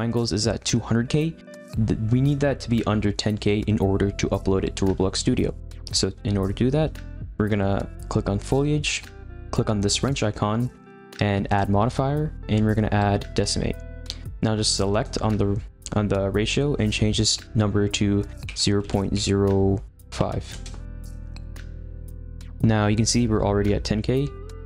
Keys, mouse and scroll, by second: 7.0-8.4 shift+middle drag, 8.4 click, 10.0 click, 13.4-18.0 drag, 24.4-24.6 drag.